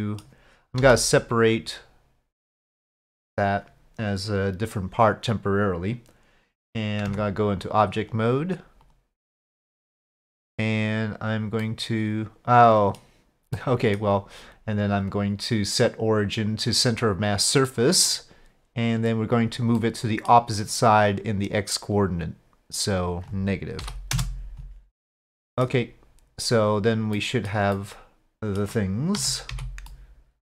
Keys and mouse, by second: 0.8 p, 7.1 Tab, 8.9 click, 10.2 click, 11.7-13.0 middle drag, 13.6-14.0 middle drag, 15.1-17.0 drag, 17.7-18.1 middle drag, 19.8-20.3 middle drag, 22.0-24.7 drag, 25.2-25.7 middle drag, 27.2-27.5 middle drag, 27.8-28.6 middle drag, 29.2 z, 29.9-30.5 middle drag.